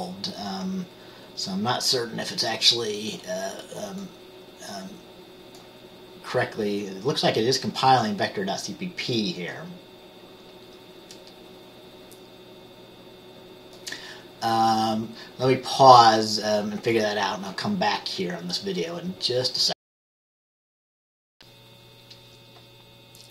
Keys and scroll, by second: 21.4 Return.